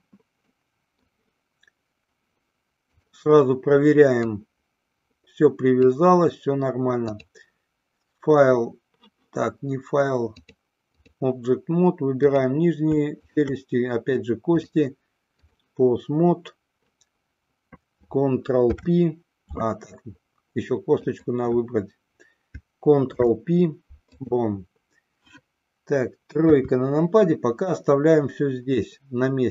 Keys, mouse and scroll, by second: 0.7 middle click, 3.0 click, 4.5-6.1 drag, 7.3-9.0 drag, 10.4-11.4 drag, 13.4 shift+click, 14.6-15.8 drag, 18.8 ctrl+p, 21.1 click, 23.3 ctrl+p, 26.7 KP_3.